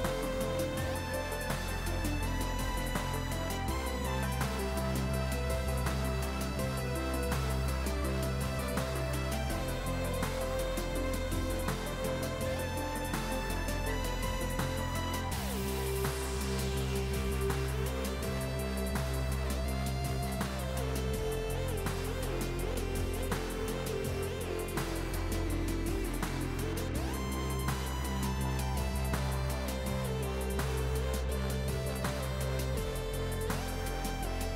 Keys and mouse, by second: 0.4 click, 1.5 click, 5.7 click, 6.2 click, 6.7 ctrl+shift+x, 6.9 click, 7.2 shift+click, 7.8 click, 8.3 click, 9.1 ctrl+click, 9.7 KP_2, 9.8 Return, 10.8 click, 10.9 right click, 11.2 click, 11.7 right click, 13.1 click, 13.3 right click, 14.1 click, 14.5 right click, 15.2 click, 15.4 right click, 15.8 click, 16.8 right click, 17.3 click, 18.4 right click, 18.6 click, 19.1 right click, 19.5 click, 21.1 ctrl+click, 21.4 x, 21.6 click, 22.5 5, 22.8 ctrl+1, 22.9 click, 23.5 click, 23.9 ctrl+1, 24.0 click, 26.4 click, 26.6 right click, 26.9 click, 27.3 right click, 27.6 click, 28.6 alt+y, 29.2 click.